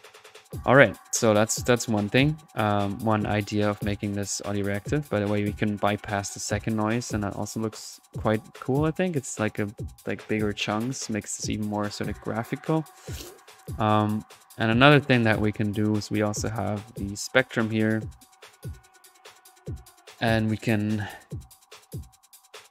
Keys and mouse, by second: 0.5 middle click, 1.1-2.2 drag, 2.2 middle click, 3.0-5.4 drag, 11.3-12.4 drag, 12.7 middle click, 13.2 click, 13.8 middle click, 14.3 click, 15.0 click, 16.4 right click, 17.7-18.5 typing, 18.0 drag, 18.2-18.8 drag, 18.8 middle click, 19.1 click, 21.3 right click, 22.4-22.7 typing.